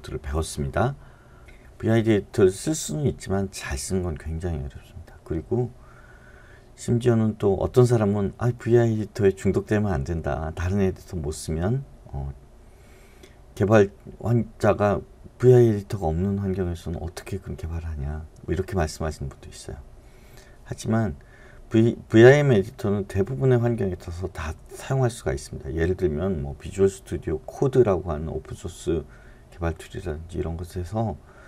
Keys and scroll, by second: 1.4 Right.